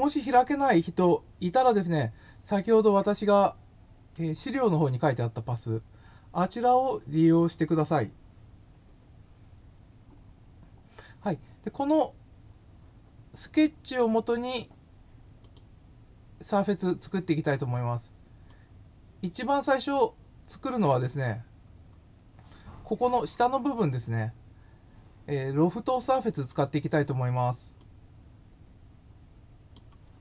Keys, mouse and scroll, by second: 15.4 click, 18.4-19.8 drag, 20.7 click, 21.2 scroll down 1, 21.8 scroll up 1, 24.5 scroll down 1, 25.1 scroll down 1, 27.8-29.7 drag.